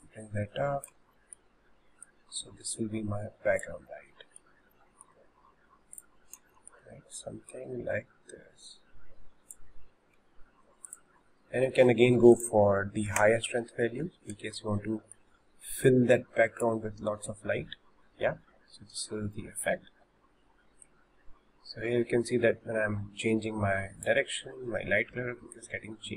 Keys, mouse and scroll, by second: 0.0 click, 1.3 shift+middle click, 2.2 click, 4.1-5.1 middle drag, 5.1 scroll down 1, 5.4 s, 6.6 shift+middle click, 7.5 click, 10.2 s, 12.3-15.4 drag, 15.4-19.0 shift+middle drag, 19.0 click, 20.9 click, 25.6 click.